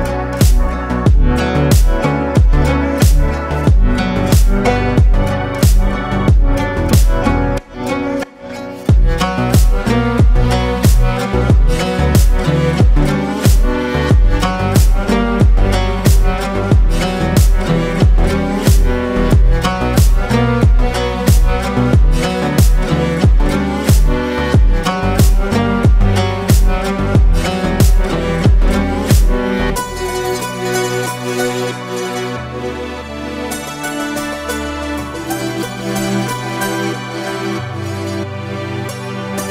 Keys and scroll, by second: 9.2 KP_Subtract, 10.0 KP_2, 10.2 KP_5, 17.7 KP_Subtract, 18.8 KP_5, 33.7 ctrl+g, 35.2 space, 36.1 ctrl+space, 37.2 ctrl+i.